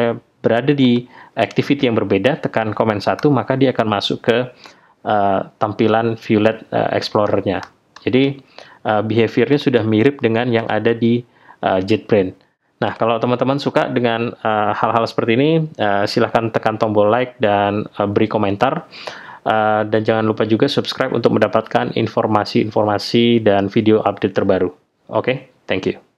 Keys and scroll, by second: 3.2 super+1, 7.2 super+1, 9.7 super+1, 10.9 super+1.